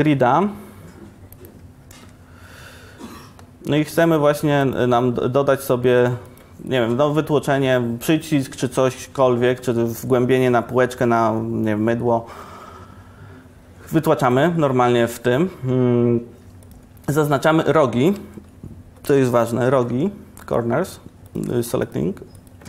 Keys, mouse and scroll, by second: 2.1 Tab, 4.1 ctrl+Tab, 12.4 e, 21.2-22.6 middle drag.